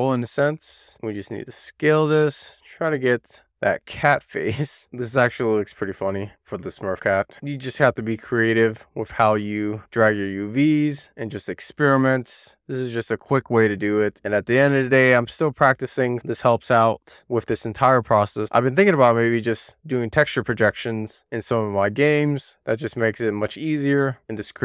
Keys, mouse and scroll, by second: 1.0 e, 1.2 click, 2.1 w, 2.3 e, 2.9 w, 3.1 click, 6.6 e, 6.8-7.4 scroll up 1, 7.7 click, 8.0 middle click, 8.4 w, 8.6 e, 8.9 click, 10.4 w, 10.6 e, 10.8 w, 11.4 click, 12.5 w, 12.7 click, 13.6 click, 14.6 middle click, 15.2 middle click, 15.4 w, 15.5 click, 16.3 middle click, 16.7 click, 17.2 middle click, 17.6 scroll up 1, 17.8 w, 18.1 w, 18.3 click, 18.6 click, 19.4 scroll up 1, 19.6 scroll down 1, 19.9 click, 21.2 click, 21.4 click, 21.7 click, 22.1 super+z, 22.2 click, 23.2 click, 24.1 click, 24.5 click.